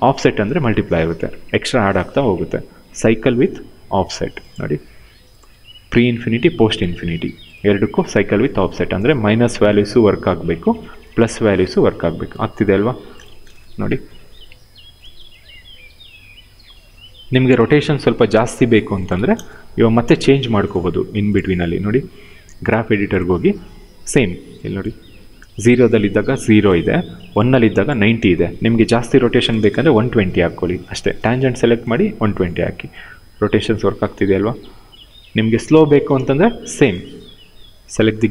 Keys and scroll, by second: 13.0 0, 13.1 Return, 18.9 0, 19.1 Return, 28.6 1, 29.3 Return, 35.8 ctrl+z.